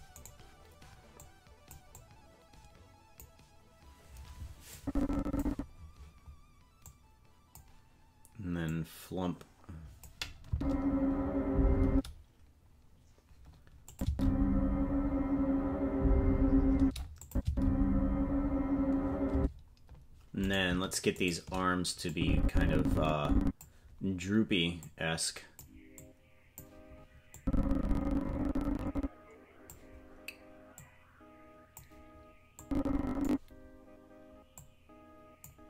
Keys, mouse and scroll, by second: 0.2 right click, 1.2 click, 1.9-3.2 drag, 4.7 click, 6.8 click, 8.6-10.1 drag, 10.5 space, 11.9 space, 13.9-16.0 drag, 14.0 space, 16.8 space, 17.2 click, 17.4 space, 19.3 space, 20.5 right click, 21.3 shift+right click, 22.1-23.6 drag, 24.8 click, 26.0 click, 27.3-29.7 drag, 30.7-31.8 drag, 32.6 click, 34.5 click.